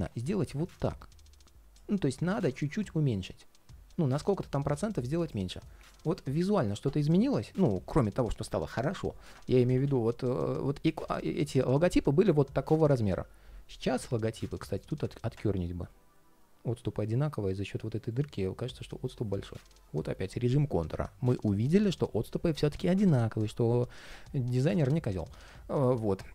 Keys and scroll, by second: 1.7 ctrl+shift+4, 5.8 ctrl+shift+4, 9.2 super+z, 15.0 ctrl+shift+3, 17.8 ctrl+shift+3, 19.1 ctrl+shift+3, 24.9 ctrl+shift+3.